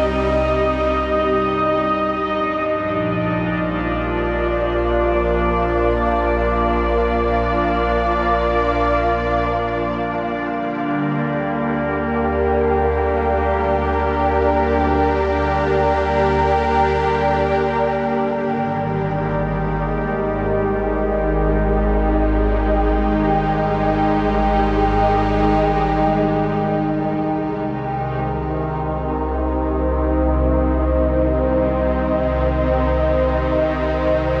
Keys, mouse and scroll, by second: 0.0 ctrl+c, 2.1 click, 3.0 ctrl+v, 3.9 click, 6.5-7.2 typing, 7.7 click, 8.1-8.7 scroll down 1, 8.7 click, 9.9-10.7 typing, 10.2 click, 10.3 click, 11.5 click, 12.8-14.8 alt+shift+drag, 14.8 z, 15.0 click, 15.3 space, 15.4 click, 15.5 z, 15.7 click, 15.9 space, 16.0 click, 17.9 right click, 18.2 click, 24.4 ctrl+z, 25.9-28.2 typing, 30.2-34.4 drag, 31.8 typing.